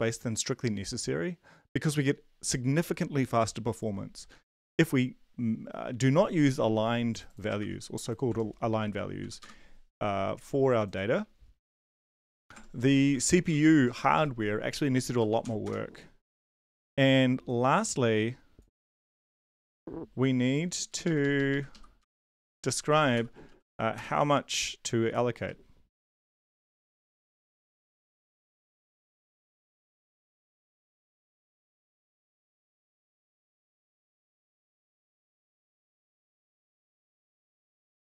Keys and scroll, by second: 7.6 ctrl+c, 8.3 shift+Tab, 8.8 ctrl+v, 9.2 ,, 9.4 Return, 11.6 ctrl+c, 12.5 shift+Tab, 13.0 ctrl+v, 13.4 l, 14.1 ., 15.2 BackSpace, 15.4 ,, 15.6 Return, 19.2 ctrl+c, 21.2 Up, 21.3 Up, 21.7 Left, 22.0 Return, 23.2-25.0 typing, 26.1-31.8 typing, 32.4 ctrl+Left, 32.6 ctrl+Left, 32.7 ctrl+Left, 33.5 ctrl+Left, 34.4 ctrl+c, 34.5 Down, 34.7 Down, 34.9 Down, 35.7 Tab, 36.1 ctrl+v, 36.5 ., 38.0 BackSpace.